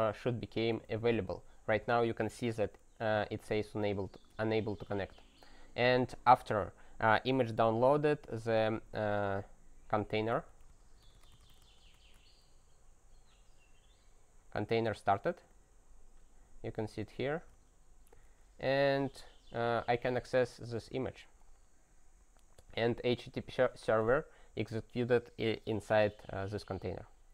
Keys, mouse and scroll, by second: 3.5 alt+w, 5.0 Return, 9.8-12.4 typing, 15.2 click, 15.3 double click, 15.5 click, 17.0 click, 17.1 click, 20.8 click.